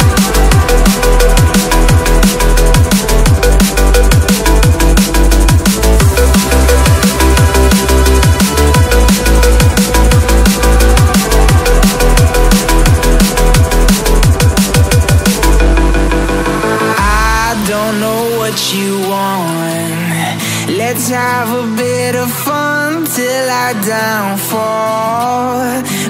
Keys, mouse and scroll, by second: 0.4 ctrl+i, 1.6 ctrl+t, 3.1 ctrl+z, 5.5 ctrl+j, 5.7 ctrl+t, 6.5 ctrl+z, 7.4 ctrl+t, 8.6 ctrl+j, 8.9 ctrl+t, 10.9 ctrl+t, 11.6 shift+click, 13.5 ctrl+t, 14.7 ctrl+t, 15.7 alt+scroll up 1, 16.6 ctrl+z, 16.7 double click, 17.3 ctrl+t, 17.6 alt+scroll down 1, 18.2 double click, 22.4 alt+scroll down 1, 22.5 alt+scroll up 1, 24.7-25.3 typing.